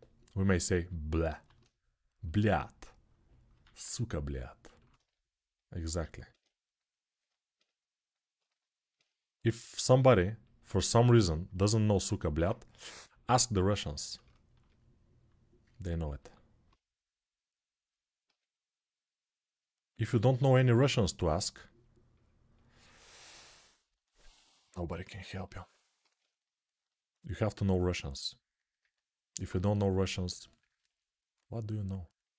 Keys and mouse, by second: 1.1 alt+q, 1.5-32.3 drag, 3.5 alt+q, 9.7 s, 12.1 alt+q, 15.9 alt+q, 18.0 q, 20.6 s, 25.8 alt+q.